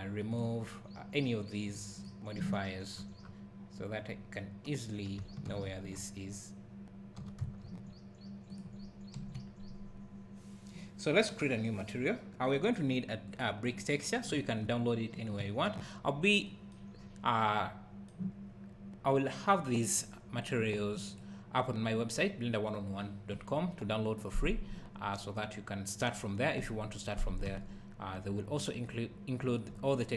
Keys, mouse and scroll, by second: 0.3 click, 1.7-5.5 drag, 2.9 scroll down 1, 4.1-4.5 scroll up 1, 5.5 alt+g, 5.9 scroll up 1, 7.0 scroll down 1, 7.2-8.6 drag, 7.2 g, 9.2 KP_Decimal, 9.9-10.8 scroll up 1, 11.3 click, 12.5 click, 13.3-19.9 drag, 14.3 `, 16.1-16.4 scroll down 2, 17.0-17.4 scroll up 1, 20.4 click, 20.7 click, 21.1 click, 27.8 scroll down 1, 29.4 `.